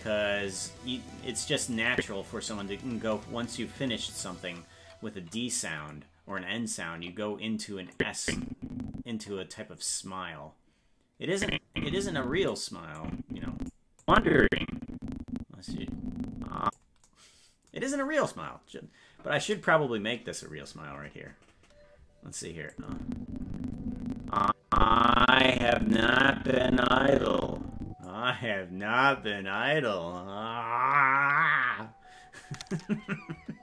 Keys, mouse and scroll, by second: 1.9 click, 8.0-9.2 drag, 11.4-12.5 drag, 13.0 click, 14.0-16.8 drag, 22.7-28.1 drag.